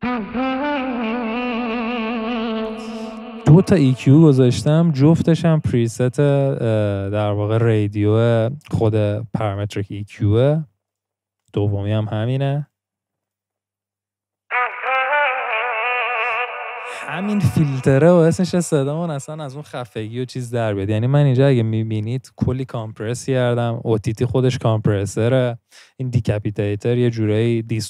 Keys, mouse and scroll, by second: 15.6-16.8 scroll down 4.